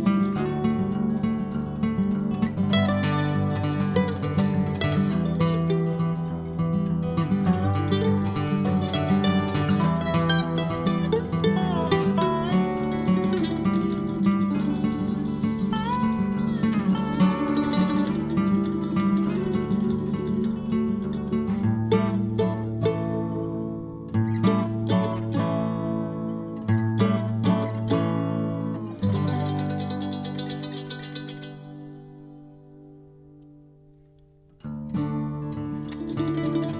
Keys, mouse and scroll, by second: 0.2 click, 0.7-3.6 drag, 3.6-5.1 scroll down 3, 5.1 click, 5.8-7.2 scroll down 8, 7.2 click, 8.3-9.8 scroll down 5, 9.8-10.4 scroll down 1, 10.4-11.1 scroll down 4, 11.1-12.6 scroll down 1, 12.6-15.4 scroll down 8, 16.2-18.7 scroll down 24, 18.7-20.3 drag, 22.0-23.5 drag, 24.5 click, 25.3 middle click, 25.3-26.1 scroll up 4, 25.6 middle click, 26.1-27.7 scroll down 1, 28.8 click, 29.3 click, 30.0-31.5 drag, 32.0 click, 32.8 shift+click, 33.1 shift+click, 33.4 click, 34.7 click, 35.2 click, 36.5 click.